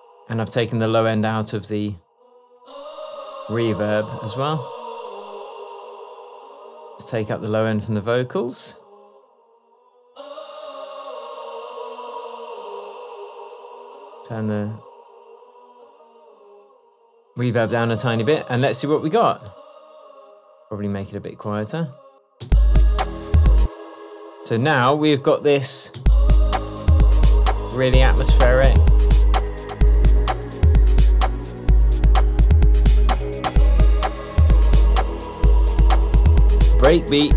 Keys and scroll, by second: 1.7 Tab, 18.4 space, 22.5 space, 23.7 space, 26.1 space.